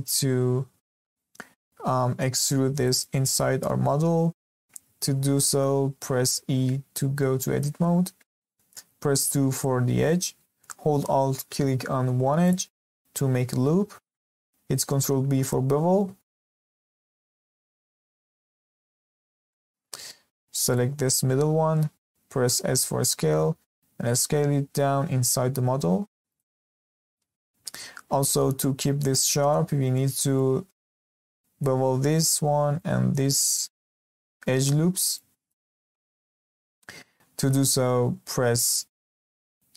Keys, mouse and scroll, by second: 5.0 Escape, 6.4 Tab, 8.1-8.5 scroll up 1, 8.5 shift+middle click, 9.1 2, 12.4 alt+click, 14.8 ctrl+b, 19.2 scroll up 3, 19.4-20.6 shift+middle drag, 20.6 alt+click, 22.6 s, 36.3 Escape.